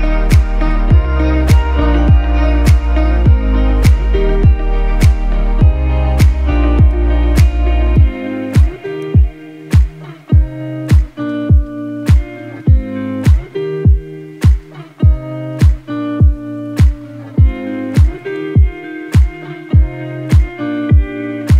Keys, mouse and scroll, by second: 8.8 click, 8.9 click, 15.7 click, 16.0 click.